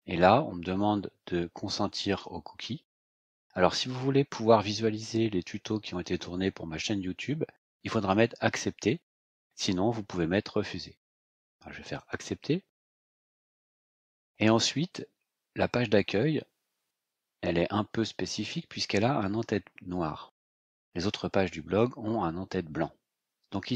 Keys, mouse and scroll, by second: 11.9 click.